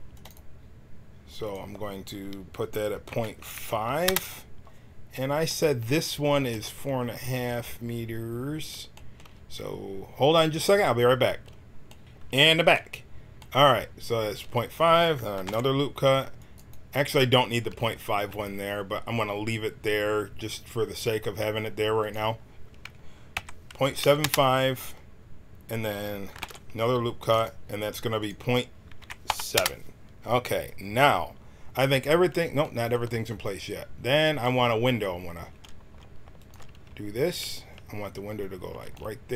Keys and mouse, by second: 1.4-4.1 drag, 5.4-12.0 middle drag, 12.0 Tab, 12.0 KP_Decimal, 12.0 KP_1, 14.4 a, 15.4 ctrl+r, 17.5-18.6 drag, 26.3 ctrl+r, 29.5 click, 36.3-38.7 drag.